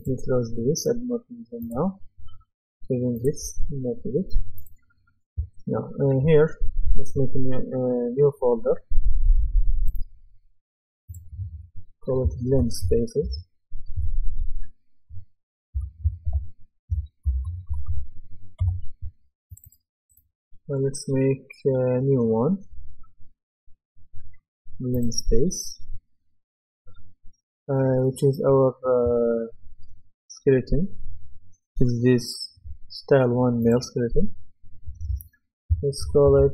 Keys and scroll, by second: 12.2-14.0 typing, 15.7-18.4 typing, 18.6 Return, 36.0 shift+b.